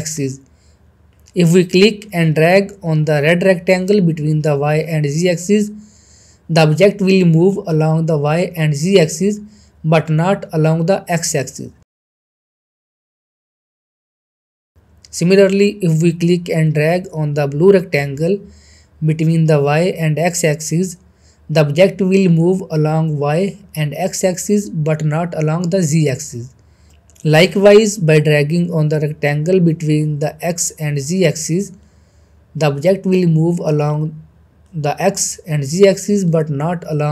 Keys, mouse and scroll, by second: 1.3-10.1 drag, 10.4 ctrl+z, 13.4-14.6 drag, 14.7 ctrl+z, 17.4 ctrl+z, 17.7-27.4 drag, 28.0 ctrl+z, 28.5-30.0 middle drag, 30.9-37.1 drag.